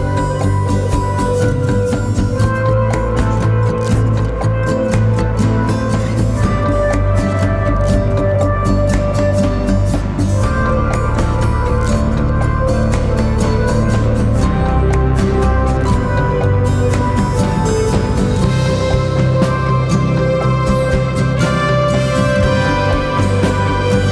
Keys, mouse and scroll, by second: 0.3 typing, 0.8 double click, 1.6 typing, 1.8 double click, 3.0 typing, 3.5 double click, 14.6-17.6 typing, 16.9 double click, 17.6 double click.